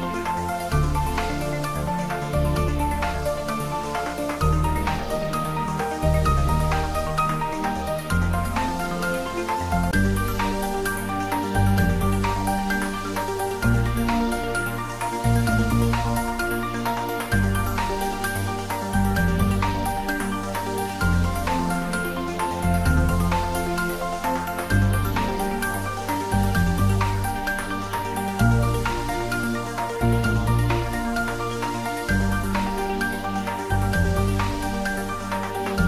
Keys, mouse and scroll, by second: 0.4 g, 0.8 z, 2.2 click, 2.8 middle click, 3.7 click, 4.3 scroll down 1, 5.2-12.0 middle drag, 18.7-19.1 scroll up 1, 19.1 click, 22.3 click, 29.0-29.5 scroll up 1, 29.5-29.8 scroll down 1, 29.8-32.1 middle drag, 32.1 scroll up 1, 32.6-35.5 middle drag, 35.5 click.